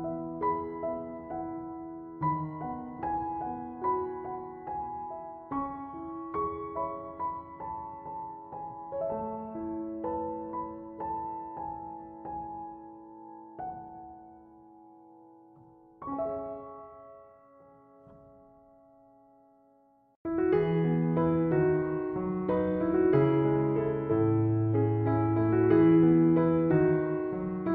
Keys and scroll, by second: 6.8 6, 7.0 Return, 21.6 5, 21.8 Return.